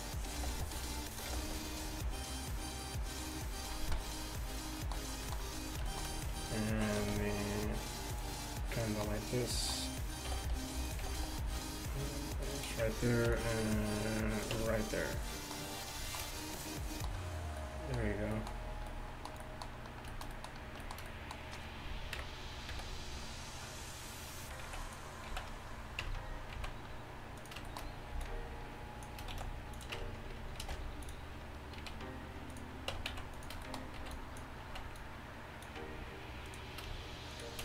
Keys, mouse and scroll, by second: 1.2 g, 1.3 g, 7.0 s, 10.9 g, 11.1 g, 13.3 ctrl+r, 14.6 Tab, 22.2 KP_1, 22.8 a, 24.7 z, 24.9 click, 25.3 z, 26.1 Tab, 26.6 z, 28.2 b, 29.4 shift+s, 30.0 Tab, 30.7 ctrl+alt+shift+c, 31.9 z, 33.0 Tab, 33.1 z, 34.0 b, 34.7 z, 35.0 click, 35.0 right click.